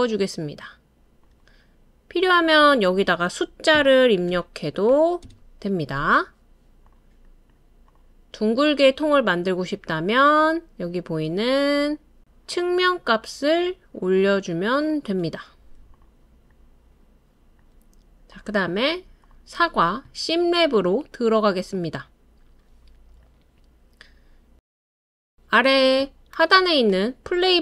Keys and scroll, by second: 3.8-4.9 typing, 5.3 Return, 8.0 typing, 17.2-17.8 typing, 24.2 typing.